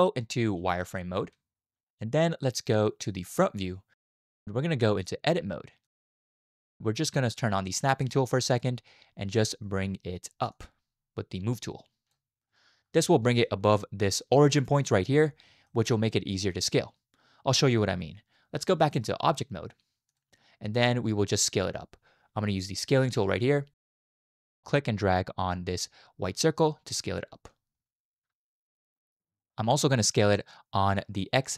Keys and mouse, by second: 0.6 z, 5.0-6.0 drag, 8.5 click, 10.6-12.1 drag, 13.3 shift+click, 15.7 shift+click, 18.8-20.2 drag, 22.9 click, 26.3 click, 26.5-28.6 drag, 29.4 shift+click.